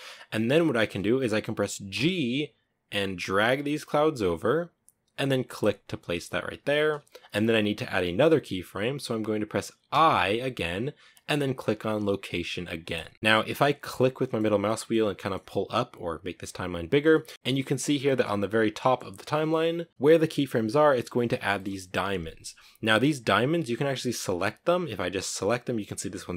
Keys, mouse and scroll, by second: 1.2 g, 15.7-22.9 drag, 22.9 right click.